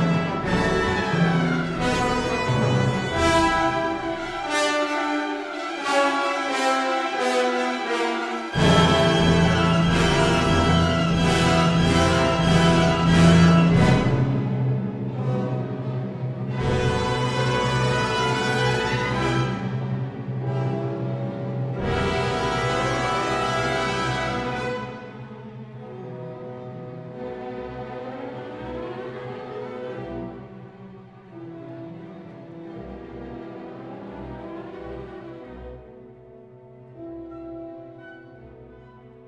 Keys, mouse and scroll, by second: 0.7 Tab, 2.0 shift+a, 4.0-6.2 drag, 6.7-8.0 drag, 9.0 Tab, 10.1 3, 10.1 KP_1, 12.0 3, 14.0 alt+z, 15.3 click, 15.8-18.4 drag, 17.1 Delete, 18.7 a, 19.3 r, 20.4 x, 20.6 9, 20.6 0, 21.2 Return, 22.0 s, 22.1 x, 23.7 click, 24.2 s, 25.4 click, 26.6 alt+z, 28.4 s, 30.5 click, 30.5 y, 33.6 s, 33.8 y, 35.3 click, 36.5 g, 36.7 y.